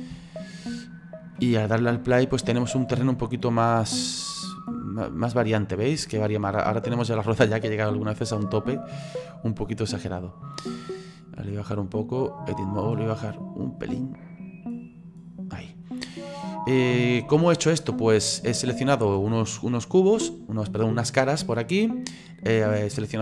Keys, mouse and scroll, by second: 0.2-1.5 shift+middle drag, 1.5-2.4 scroll up 2, 2.8 click, 6.1-9.2 shift+middle drag, 9.9-10.7 drag, 11.5 click, 15.9-16.2 scroll down 4, 16.2 scroll up 1, 16.4-21.3 middle drag.